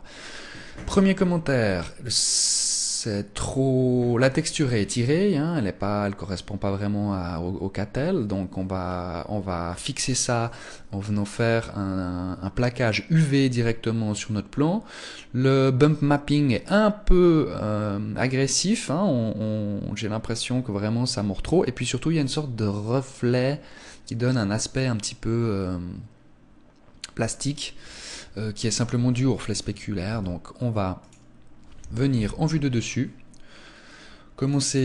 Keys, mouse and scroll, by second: 28.8 Escape, 29.9 ctrl+s, 32.0 KP_1, 33.3-34.1 scroll up 7, 34.3 click.